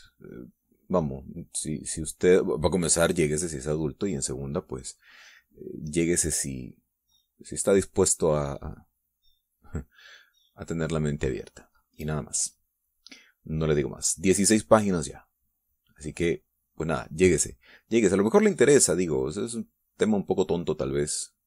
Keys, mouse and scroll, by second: 6.9-10.4 drag, 13.2-17.0 drag, 19.1-21.4 drag.